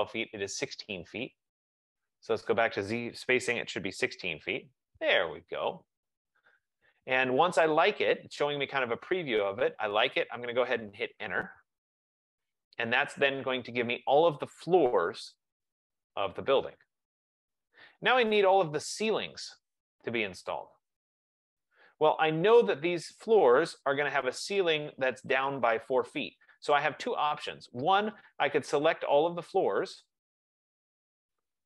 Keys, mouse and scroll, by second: 2.2-3.8 drag, 3.3-4.6 typing, 9.4 typing, 11.5 Return, 21.1 F15.